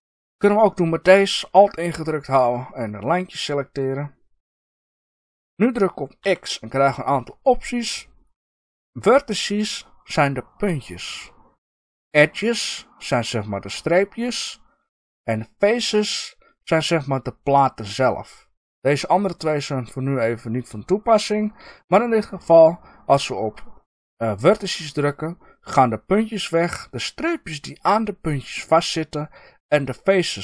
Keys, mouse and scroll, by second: 2.8 alt+click, 6.2 x.